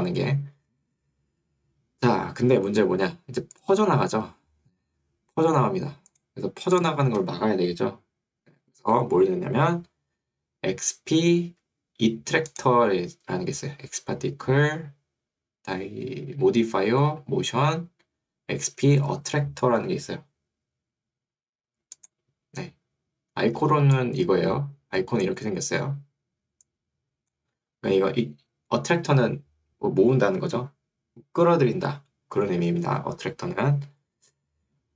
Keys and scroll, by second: 27.7 Escape.